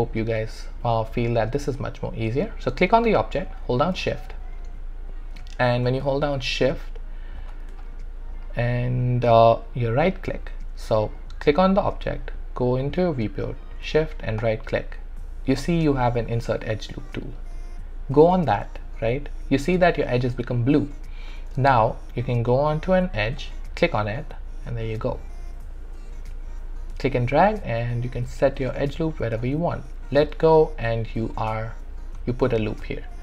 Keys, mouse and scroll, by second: 1.5 alt+click, 6.1-7.7 shift+drag, 7.8 shift+click, 8.4-10.6 shift+right drag, 11.2 click, 13.9 click, 14.4-23.4 shift+right drag, 23.4-32.9 drag.